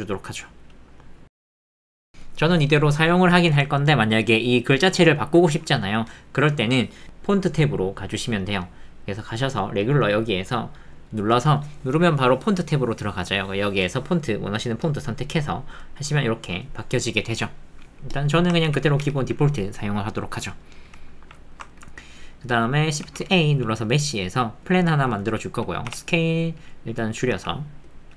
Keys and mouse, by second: 1.0 click, 1.0 middle click, 1.0 click, 1.2 middle click, 1.2 click, 1.7-10.8 ctrl+drag, 16.1 click, 18.6 ctrl+z, 19.0 ctrl+z, 20.6 middle click, 20.8 click, 21.0 alt+middle click, 21.5 shift+middle click, 21.7 ctrl+middle click, 24.7 shift+a, 25.9 s.